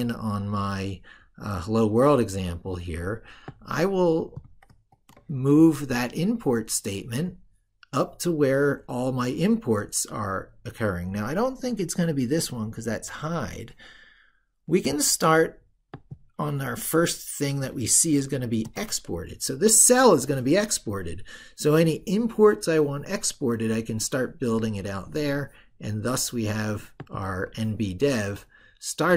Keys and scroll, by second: 4.4 ctrl+x, 18.5 ctrl+v.